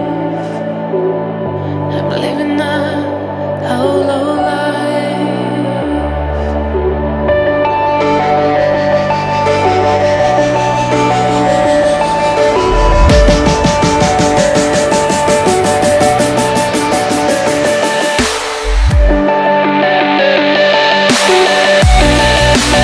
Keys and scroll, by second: 0.9 ctrl+t, 11.8 ., 13.5 Return, 14.6-22.8 typing, 17.6 Caps_Lock, 19.4 Return.